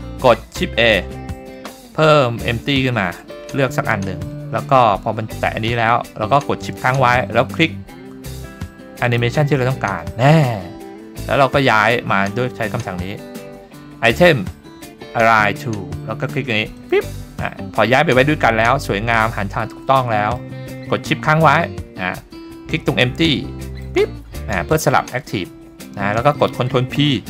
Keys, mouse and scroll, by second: 1.3 shift+a, 9.1 shift+click, 12.2-15.2 scroll down 1, 15.2 scroll down 1, 16.8 click, 17.8-18.6 scroll up 4, 18.6-19.3 middle drag, 19.8-20.4 middle drag, 23.4 shift+middle click, 23.7 shift+click, 27.0 ctrl+p.